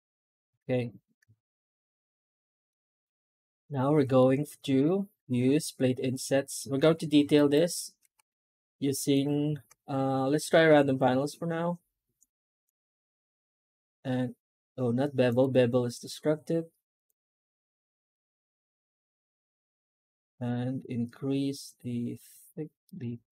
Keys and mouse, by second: 0.5 alt+shift+z, 2.6 middle drag, 2.9-3.9 middle drag, 4.0 middle click, 7.2-7.9 drag.